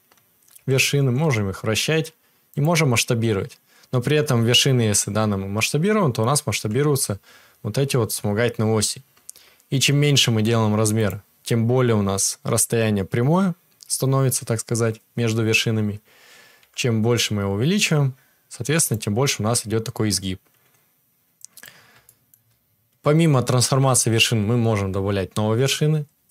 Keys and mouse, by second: 1.2 r, 2.6-21.3 middle drag, 6.5 s, 16.6 s, 21.3-26.3 drag.